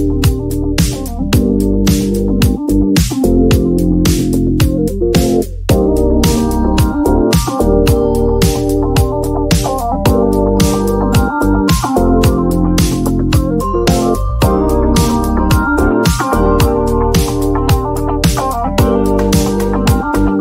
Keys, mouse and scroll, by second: 0.0 click, 1.7 click, 2.2 click, 4.6-6.0 typing, 7.3-8.0 [, 8.3 [, 8.4 [, 10.6 click, 10.8 click, 10.9 click, 11.1 click, 11.2 click, 11.4 click, 11.6 click, 11.9 click, 12.1 click, 12.5 click, 12.7 click, 12.9 click, 13.1 click, 13.3 click, 13.4 click, 13.8 click, 14.1 click, 14.9 click, 15.1 click, 15.2 click, 15.4 click, 15.6 click, 15.8 click, 15.9 click, 16.0 click, 16.3 click, 16.6 click, 16.6 click, 16.8 click, 17.0 click, 17.0 click, 18.4 click, 19.1 click, 20.2 click.